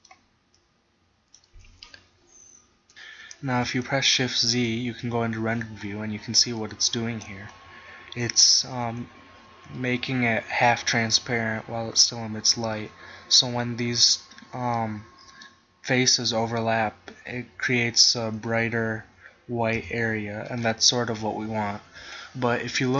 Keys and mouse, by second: 4.5 shift+z, 8.5-9.8 middle drag, 10.4 middle click, 11.7-13.2 middle drag, 15.0-16.0 middle drag, 17.4 middle click, 19.9 KP_1.